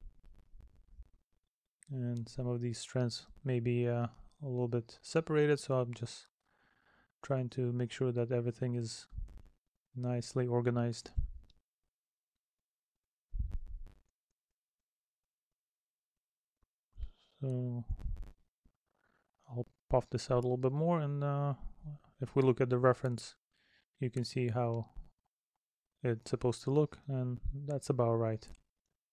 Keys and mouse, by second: 3.1 middle click, 4.3 middle click, 5.3 middle click, 6.1 middle click, 7.3 middle click, 8.8 middle click, 9.5 middle click, 12.6 middle click, 13.9 middle click, 18.9 middle click, 20.1 middle click, 27.6 middle click, 28.7 middle click.